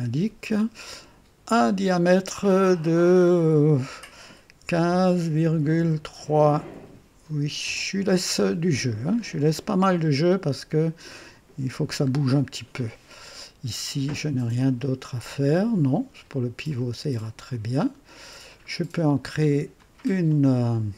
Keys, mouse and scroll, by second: 1.5 click, 4.6 KP_1, 4.9 KP_5, 5.4 KP_Decimal, 5.8 KP_3, 7.6 KP_Enter, 9.1-9.5 scroll up 1, 11.3 typing, 12.2 scroll down 1, 17.5 click, 18.5-19.7 drag, 19.8-20.6 drag.